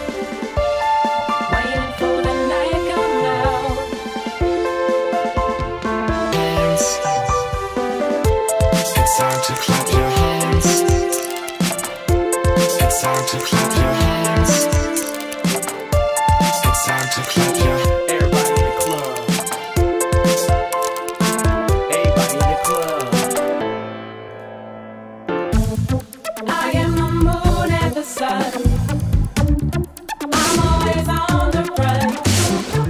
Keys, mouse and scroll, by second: 4.8-5.1 drag, 6.1 scroll down 2, 6.9 click, 8.4 click, 11.0 click, 19.0-20.3 drag, 22.2 click, 22.6 click, 24.3 click, 25.2 click, 26.1 click, 28.1 click, 32.4-32.8 typing.